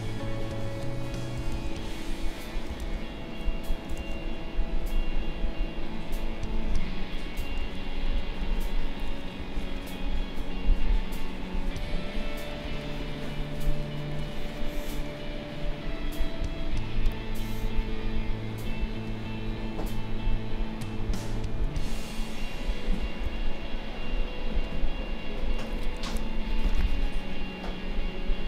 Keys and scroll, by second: 1.5 ctrl+z, 2.8 ctrl+z, 4.0 ctrl+z, 7.6 ctrl+z, 8.2 space, 9.6 ctrl+z, 12.6 space, 23.2 v.